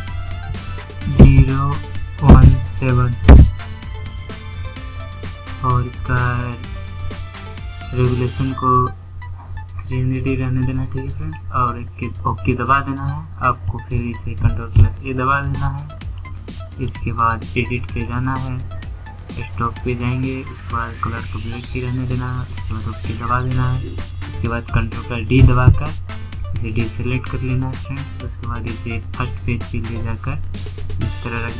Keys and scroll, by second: 13.0 ctrl+a, 24.1 ctrl+d.